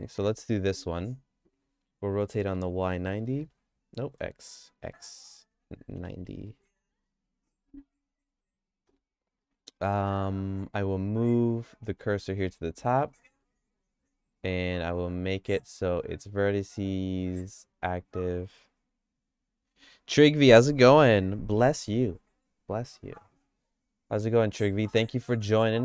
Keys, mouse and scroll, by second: 2.2 r, 9.4 middle click, 10.8 Tab, 11.5 click, 11.9 Tab, 12.2 Tab, 12.4 q, 13.3 Tab, 15.2-18.1 drag, 23.9 g.